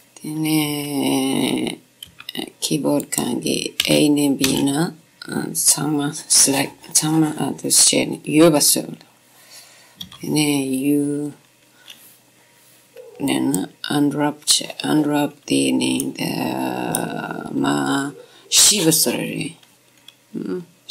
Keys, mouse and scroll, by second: 0.8 u, 3.4-5.1 drag, 4.4 a, 4.8 a, 10.3 u, 15.5-20.9 middle drag.